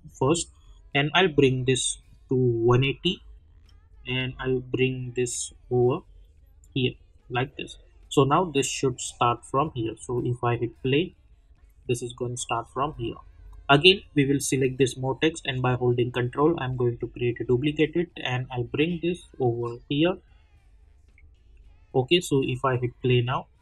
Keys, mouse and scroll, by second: 10.1 click, 15.5-17.8 ctrl+drag, 17.8-22.7 drag.